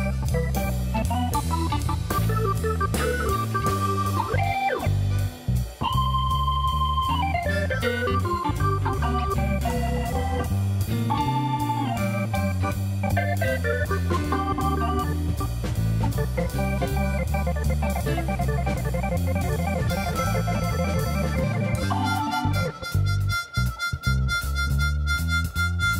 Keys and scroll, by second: 1.4-2.4 typing, 2.4 Return, 5.6 ctrl+shift+t, 20.9 Tab, 25.0 alt+a.